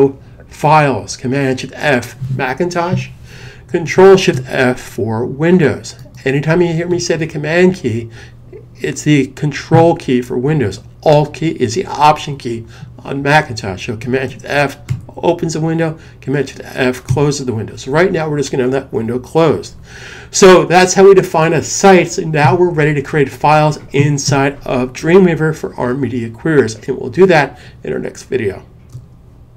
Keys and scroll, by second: 14.7 shift+super+f, 16.9 f.